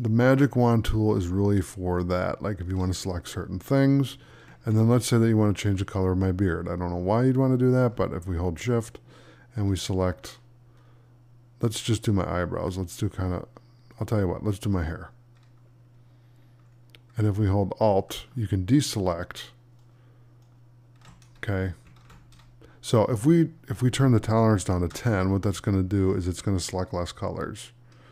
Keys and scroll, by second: 4.5 ctrl+d, 21.9 ctrl+d.